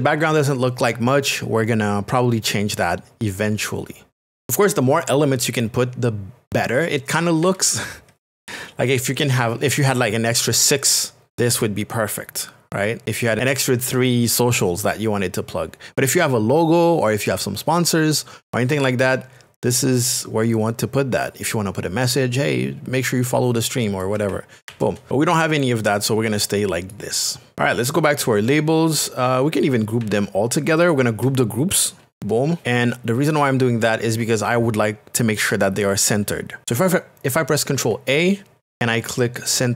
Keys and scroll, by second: 32.6 g.